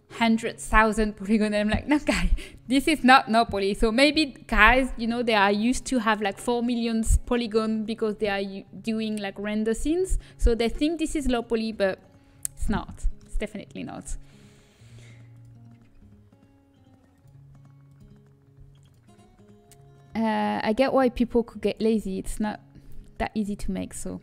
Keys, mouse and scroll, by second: 14.3-15.4 middle drag.